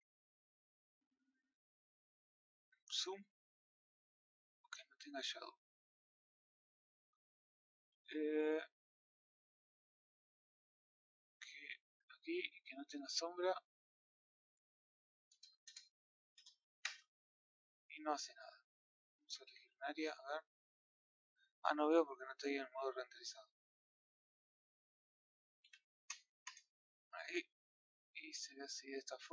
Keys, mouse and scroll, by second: 4.7 scroll up 2, 6.0 click, 12.5 click, 16.8 KP_0, 19.6 click, 20.7 click, 22.1 click, 23.6-27.3 drag, 27.3-27.7 scroll up 6, 28.1-29.3 middle drag.